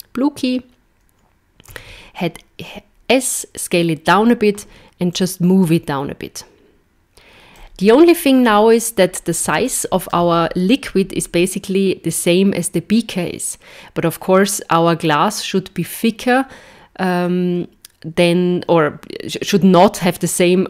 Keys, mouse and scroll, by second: 5.2 click, 8.5 scroll up 2, 9.1-9.5 scroll up 1, 9.7 shift+middle click, 10.5-12.2 scroll up 1.